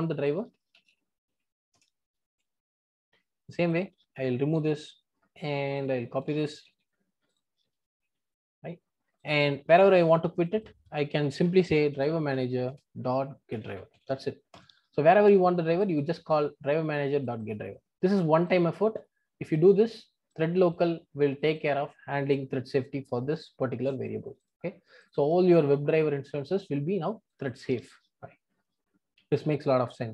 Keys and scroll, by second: 1.7 Return, 4.6 super+BackSpace, 6.6 super+c, 8.0 super+v, 12.7 Return, 20.3 super+b.